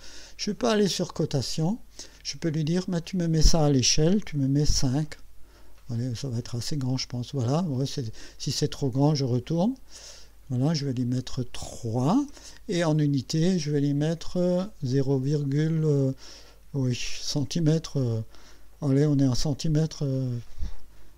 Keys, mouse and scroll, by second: 1.4 click, 2.8 click, 4.6 KP_5, 6.5 KP_Enter, 9.6 click, 11.0 click, 14.2 click.